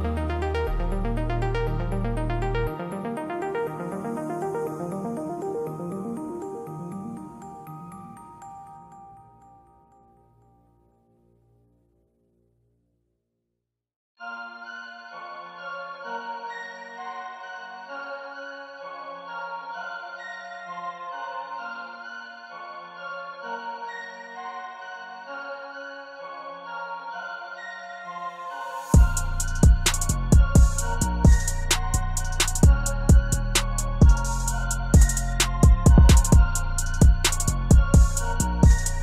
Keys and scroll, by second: 37.4 ctrl+z.